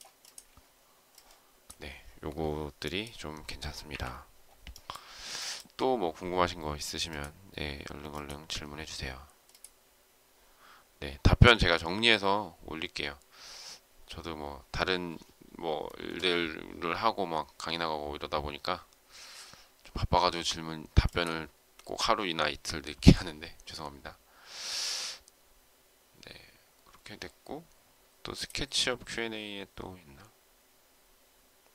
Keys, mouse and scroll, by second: 3.8 Delete, 5.3 shift+middle click.